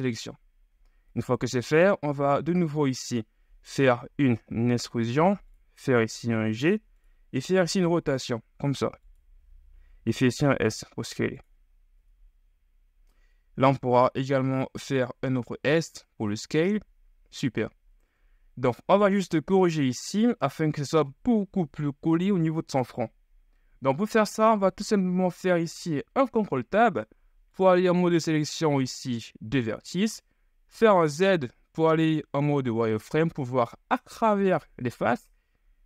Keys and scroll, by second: 1.3 KP_3, 4.5 e, 5.9 g, 7.5 r, 11.5 s, 12.1 KP_1, 13.7 s, 18.2 KP_3, 18.9 shift+KP_3, 25.7 ctrl+Tab, 30.9 z.